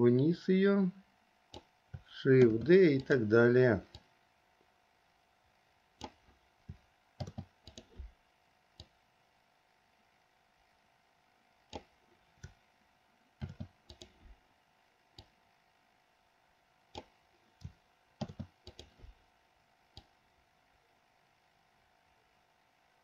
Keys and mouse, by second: 2.7 shift+d, 4.2-6.4 drag, 7.4 shift+d, 8.9-12.0 drag, 13.6 shift+d, 15.4-17.2 drag, 18.4 shift+d, 20.2-23.0 drag.